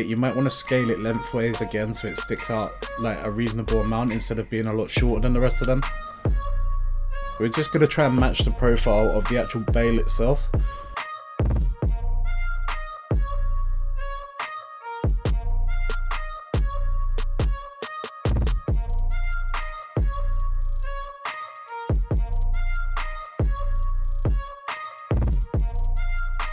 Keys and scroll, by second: 24.3 z.